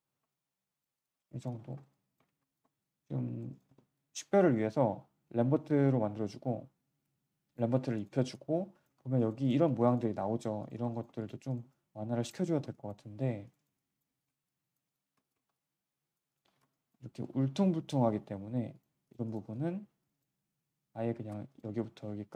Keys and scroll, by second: 2.2 alt+3, 3.6 1, 9.6 3, 10.7 1, 15.0 3, 16.5 1.